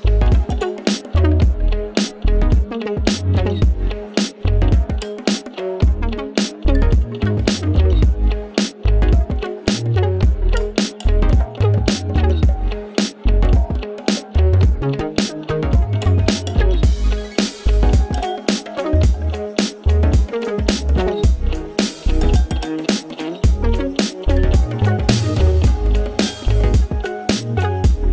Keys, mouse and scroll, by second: 0.0 click, 2.4-6.2 drag, 10.2 typing, 11.4 click, 15.3-16.1 typing, 17.6 click, 17.6 click, 19.0-26.9 drag, 27.4-28.1 drag.